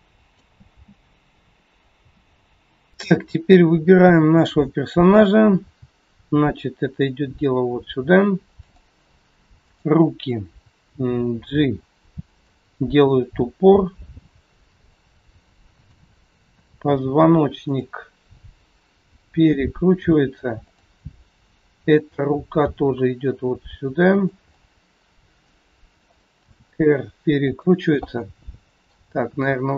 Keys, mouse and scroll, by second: 0.4 space, 2.9 shift+middle click, 2.9 click, 5.6 click, 5.6 g, 9.5 click, 11.2 g, 16.5 click, 17.6 click, 19.0 r, 21.7 click, 22.6 g, 24.3 scroll up 1, 24.6 middle click, 26.3 r, 28.1 middle click.